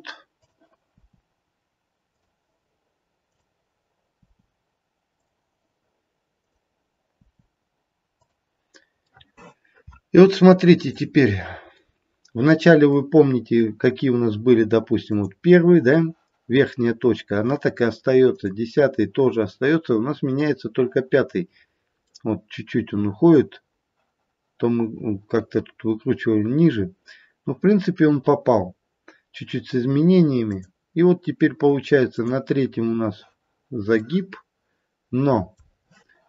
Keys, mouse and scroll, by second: 0.4 click, 0.9 i, 3.2 click, 4.1 i, 6.4 click, 7.0 i, 9.0 middle click, 9.5 middle click, 11.1 middle click, 11.1-11.8 scroll up 2, 11.8 middle click, 12.1 middle click, 12.5 middle click, 14.3 middle click, 15.0 click, 18.3 click, 20.2 click, 21.6-22.4 scroll down 1, 22.4 middle click, 30.4 click, 32.1 click, 34.0 middle click, 34.2 middle click, 35.1 middle click, 35.2 middle click.